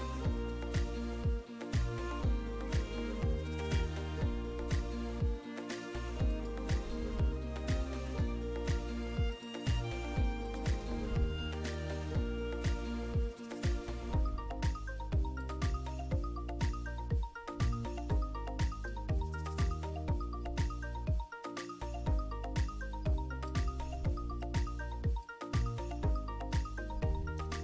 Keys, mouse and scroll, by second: 0.5 click, 6.4 click, 8.1 click, 9.4 click, 10.5 click, 11.3 2, 11.6 Return, 12.9-14.1 middle drag, 15.5 click, 18.2-19.2 drag, 21.5-23.7 drag, 24.0 middle click, 25.3-26.8 drag.